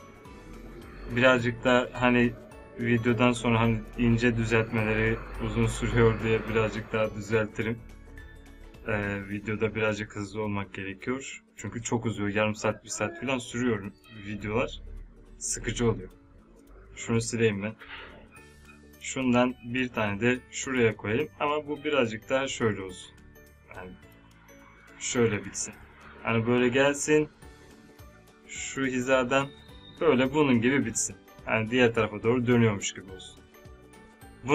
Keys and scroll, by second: 17.0 Delete.